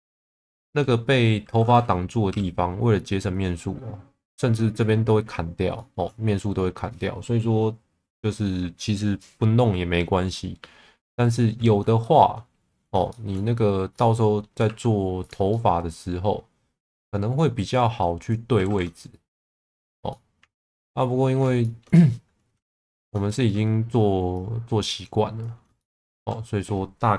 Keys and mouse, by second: 2.3 y, 3.3 click, 5.8 shift+middle click, 12.0 shift+middle click, 13.1 shift+middle click, 14.0 middle click, 14.6 2, 15.5 middle click, 17.4 click, 18.7 ctrl+z, 19.2 click, 20.1-21.3 middle drag, 21.6 shift+middle click, 22.6 1, 23.3 shift+middle click, 24.5 click, 25.8 shift+middle click.